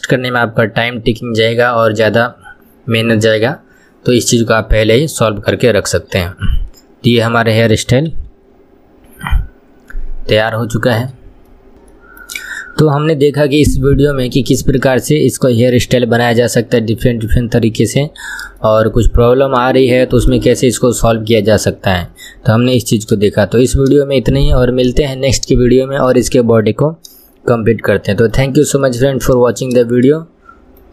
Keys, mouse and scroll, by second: 5.6-8.4 middle drag, 8.4 KP_1, 8.9 scroll up 1, 9.7 scroll down 2, 10.9-11.7 shift+middle drag, 11.7 KP_1, 12.0 scroll up 2, 12.4-13.5 shift+middle drag, 13.5 KP_3, 15.8-16.6 scroll down 1, 16.6-18.6 middle drag, 18.6 KP_1, 19.1-23.3 shift+middle drag, 23.3 KP_1, 23.8-26.8 shift+middle drag, 27.9-30.9 shift+middle drag.